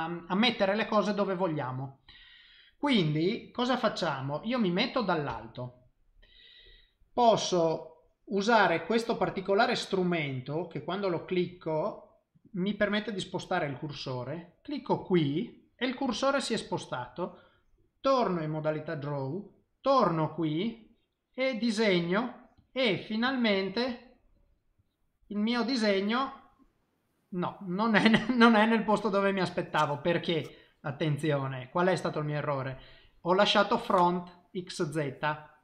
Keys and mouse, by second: 5.3 KP_7, 11.1 click, 15.1 click, 18.0 click, 19.3 middle click, 20.8 click, 22.0 click, 22.6 click, 22.9 click, 23.3 click, 23.5 click, 23.8 click, 24.3 click, 24.8 click, 25.3 middle click, 30.9 middle click, 32.7 middle click, 35.5 middle click.